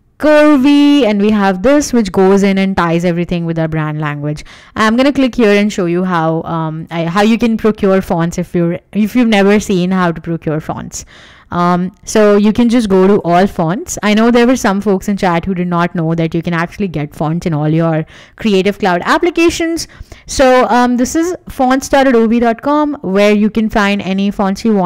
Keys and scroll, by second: 5.6-6.4 typing, 6.6 Right, 6.9 Return, 7.1 super+Tab, 10.8 super+Tab.